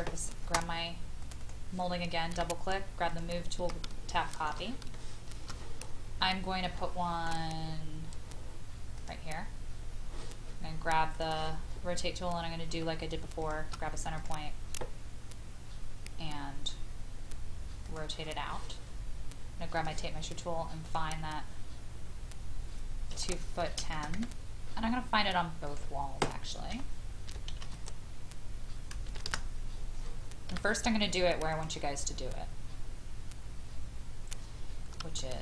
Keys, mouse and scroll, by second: 1.2 click, 3.1 click, 4.1 shift+middle click, 4.5 shift+middle click, 4.9 shift+middle click, 5.8-6.6 scroll up 1, 6.7 shift+middle click, 8.9 click, 13.4 shift+click, 14.2-18.9 drag, 23.1 KP_2, 23.8 KP_1, 23.9 KP_0, 25.6 click, 26.7 KP_2, 27.5 KP_1, 27.6 KP_0, 29.2 Return, 30.5 m, 31.5 click, 35.2 shift+middle click.